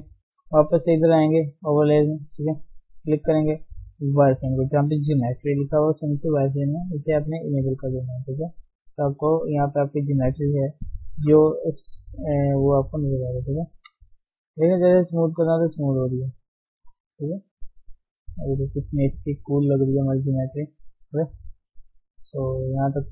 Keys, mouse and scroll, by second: 6.9 click, 7.9 middle click, 8.6 click, 9.3 middle click, 9.9 click, 10.5-11.2 scroll down 4, 11.2 KP_1, 11.8-12.7 scroll up 2, 12.2 shift+middle click, 12.7-14.1 drag, 14.1 shift+middle click, 14.2-15.0 scroll up 3, 14.5 shift+middle click, 15.0-16.1 drag, 16.1 scroll down 3, 16.2 middle click, 16.8 scroll up 1, 17.2 click, 17.6 middle click, 18.1 click, 18.9 middle click, 19.1-19.6 scroll down 2, 19.6 click, 20.1 scroll down 2, 20.4 middle click, 20.7-21.2 scroll down 2, 21.2-22.4 middle drag, 22.4-22.9 scroll up 2, 22.9 click.